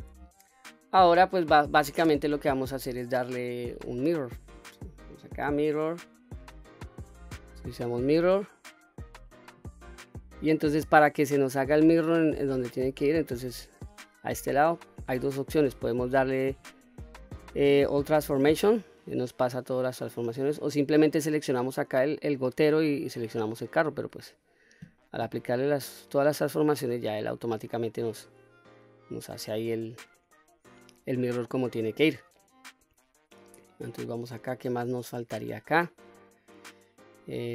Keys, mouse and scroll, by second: 5.1-7.5 drag, 12.6 middle click, 16.9 ctrl+a, 25.6 click, 26.4-26.8 scroll down 1, 26.8-27.1 middle drag, 27.4 click, 27.9-29.1 middle drag, 29.4-30.2 scroll down 2, 29.7-30.2 middle drag, 30.6 scroll up 2, 31.0-32.2 middle drag, 32.7-33.3 middle drag, 33.6-34.2 scroll down 2, 34.0-34.9 middle drag, 35.4 scroll up 1, 36.1-36.9 middle drag, 37.3 scroll down 1.